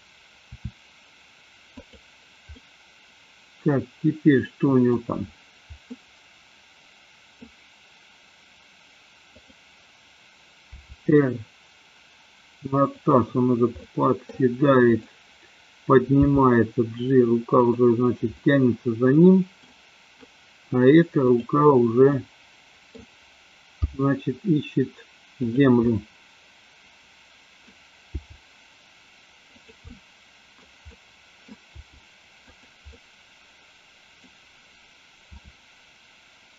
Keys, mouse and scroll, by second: 0.4 e, 2.5-4.9 middle drag, 5.9-7.4 middle drag, 9.3 click, 10.7 r, 12.9 click, 13.8 middle click, 16.3 g, 17.7 click, 18.4-19.7 middle drag, 21.3 click, 22.2 middle click, 23.8 g, 25.4 click, 25.8-27.7 middle drag, 28.0 g, 29.7 drag, 29.9-30.5 middle drag, 30.9 scroll up 1, 31.0 middle click, 31.7 g, 32.5 click, 32.8-34.3 middle drag, 35.3 r.